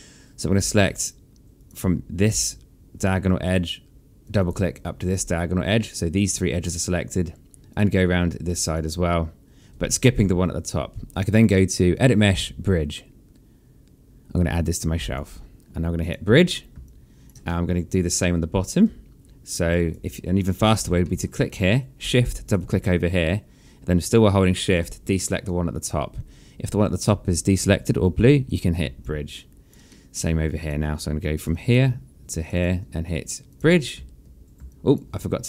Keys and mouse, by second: 1.2 click, 3.8 shift+click, 7.3 shift+click, 11.5 click, 15.6 click, 16.4 alt+click, 17.1 alt+middle click, 17.7 alt+click, 20.2 click, 20.6 alt+middle click, 22.0 shift+click, 24.3 shift+click, 28.1 click, 28.6 alt+click, 29.5 alt+middle click, 30.2 click, 31.1 alt+click, 32.0 shift+click, 34.3 alt+click, 35.0 shift+click.